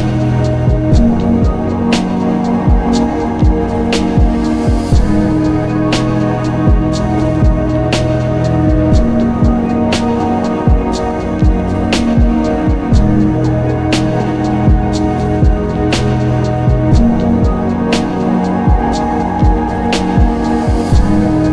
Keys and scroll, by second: 2.3 ctrl+z, 4.6 z, 8.4 ctrl+alt+z.